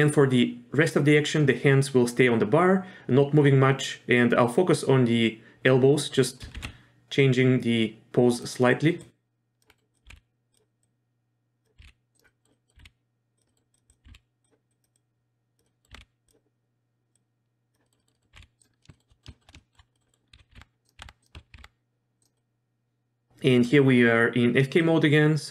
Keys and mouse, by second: 6.4 r, 9.0-9.6 drag, 9.7 middle drag, 10.1 r, 10.8-11.5 drag, 11.8 r, 12.3 middle drag, 12.5 middle click, 12.8 r, 13.5 middle click, 13.8 click, 14.1 r, 14.8 click, 14.9-15.6 drag, 15.6 middle drag, 15.9 r, 17.1-17.7 drag, 17.8 middle click, 18.0 middle click, 18.1 middle drag, 18.3 r, 18.8 middle click, 19.1 middle drag, 19.3 shift+middle click, 19.6 shift+middle drag, 19.9 middle drag, 20.1 middle drag, 20.3-21.5 typing, 22.3-22.7 drag, 22.7-23.3 middle drag, 23.5 middle click, 24.8-25.5 drag.